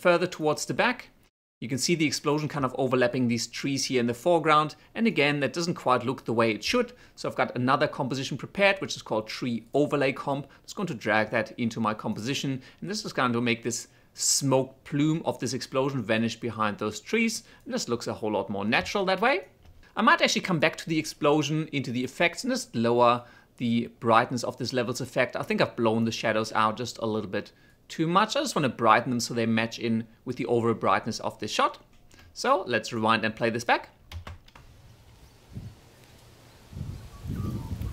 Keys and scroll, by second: 1.9 space, 34.2 shift+space.